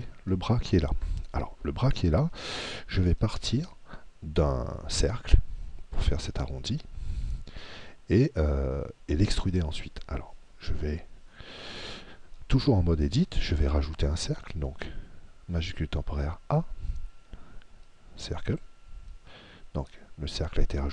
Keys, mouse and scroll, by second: 16.6 shift+a.